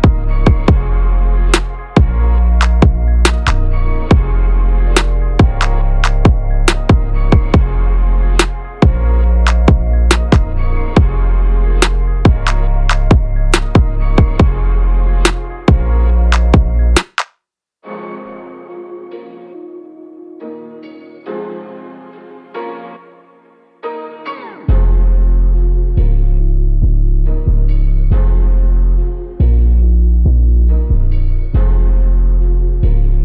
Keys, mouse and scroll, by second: 4.4 click, 9.2 click, 10.7 click, 15.9 click, 17.6 right click, 19.0 click, 21.1 ctrl+g, 23.3 ctrl+g, 25.3 ctrl+g, 27.3 ctrl+g, 28.5 click, 29.1 ctrl+g, 29.5 click, 31.7 click.